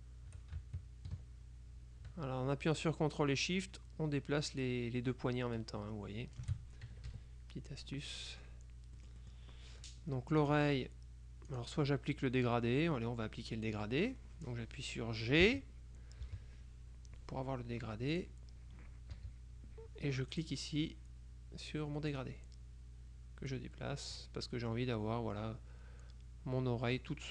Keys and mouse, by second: 7.0 ctrl+shift+KP_Subtract, 8.2 click, 9.1 click, 10.5 click, 11.6 click, 15.6 g, 16.4 g, 18.2 click, 19.2 g, 20.4 click, 22.2 click, 23.6-24.8 drag, 27.0 middle click.